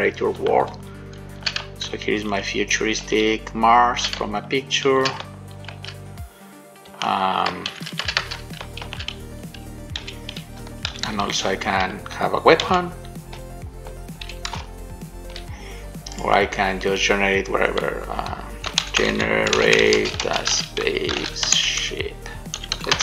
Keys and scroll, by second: 0.8 shift+w, 2.0 shift+w, 2.4 a, 3.4 shift+w, 5.8 shift+a, 7.9 shift+a, 9.0 shift+a, 10.2 f, 10.8 s, 12.8 f, 14.8 d.